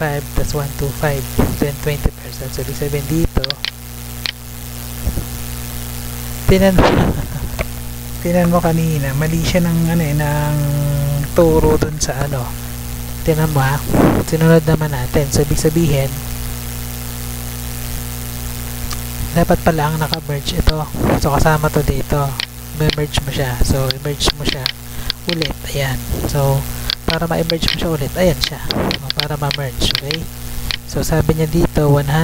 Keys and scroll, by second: 2.6 Tab, 4.8 Tab, 6.6 Tab, 17.9 Tab, 20.0 Tab, 31.0 Tab.